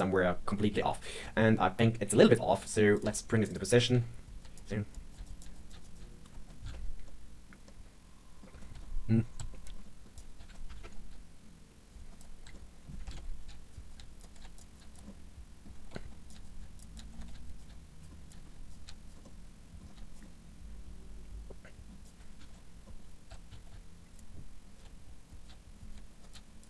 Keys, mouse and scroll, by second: 0.7 KP_1, 1.1-1.7 scroll up 2, 1.7-2.2 scroll down 1, 2.2 KP_3, 2.5-2.9 scroll up 2, 2.9 click, 3.0 g, 3.8 click, 3.9 g, 5.3 click, 5.4 g, 6.6 ctrl+KP_1, 7.0 middle click, 7.4 scroll down 2, 7.6 middle click, 8.7 ctrl+KP_3, 9.3 ctrl+KP_1, 9.7 scroll up 2, 9.8 middle click, 10.1 click, 10.7 ctrl+KP_1, 11.0 g, 12.1 click, 12.5 middle click, 13.0 ctrl+KP_1, 13.4 g, 13.8 click, 13.9 g, 14.3 g, 14.7 click, 14.9 scroll down 1, 15.0 middle click, 15.8-18.8 typing, 16.0 scroll up 2, 16.2 click, 16.9 click, 17.2 click, 17.5 click, 18.0 scroll down 3, 18.2 click, 18.6 click, 19.1 scroll down 1, 19.2 middle click, 19.8 scroll up 3, 19.9 g, 20.1 scroll down 1, 20.2 middle click, 22.0 click, 22.3 KP_1, 22.5-22.8 scroll up 3, 22.8 middle click, 23.0 click, 23.2 l, 23.4 KP_1, 23.6 g, 24.7 click, 24.7-26.6 typing, 25.4 click, 26.2 click.